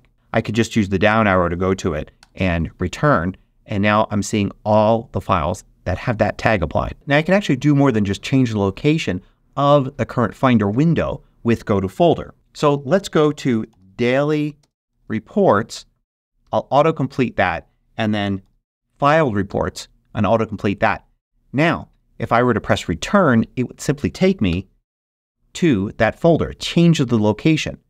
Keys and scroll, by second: 0.9 Down, 2.1 Return, 13.2-14.8 typing, 16.4 Tab, 17.9-18.8 typing, 19.4 Tab, 24.4 Return.